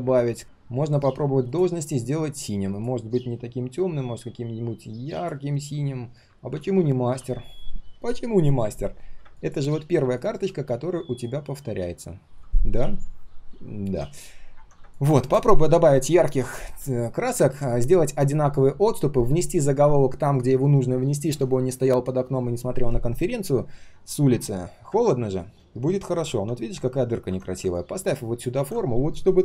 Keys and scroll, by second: 0.4 ctrl+z, 6.5 ctrl+z, 6.7 ctrl+z, 10.5 ctrl+shift+3, 11.1 ctrl+shift+3, 28.5 ctrl+z.